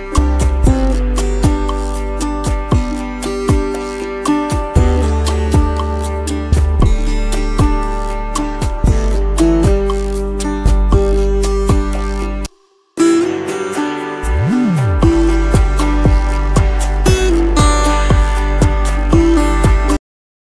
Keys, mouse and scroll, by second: 0.3 space, 2.9 double click, 3.0 space, 6.1 double click, 8.4 space, 9.2 double click, 11.4 alt+scroll up 1, 13.8 alt+scroll down 1, 14.0 space, 15.0 double click, 15.2 space, 15.4 alt+scroll down 1, 15.8 space, 19.4 double click, 20.0 ctrl+0.